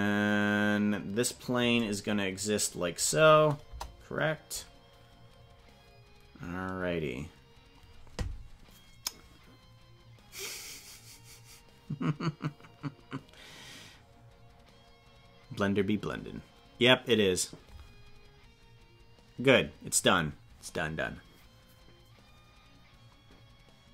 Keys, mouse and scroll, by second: 3.7 KP_0.